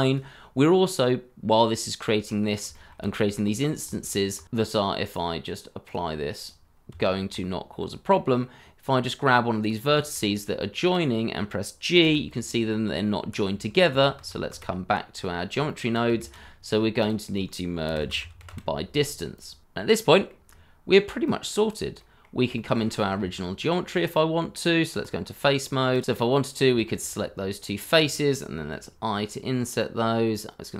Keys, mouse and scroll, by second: 2.2-2.6 scroll up 1, 2.7 shift+middle click, 2.7-3.3 shift+scroll up 1, 6.9 Tab, 7.7-8.1 scroll up 1, 8.1 middle click, 9.9 shift+middle click, 10.1 scroll up 1, 10.5 middle click, 12.0 g, 13.1 Escape, 13.9 ctrl+z, 15.6 shift+middle click, 16.2 shift+a, 17.8-18.4 typing, 19.6-20.0 scroll down 1, 20.0 middle click, 20.4-21.3 scroll down 1, 21.9 middle click, 22.5 shift+middle click, 22.8 scroll up 1, 23.1 Tab, 25.6 middle click, 26.9 shift+click, 27.3 middle click, 28.7 i.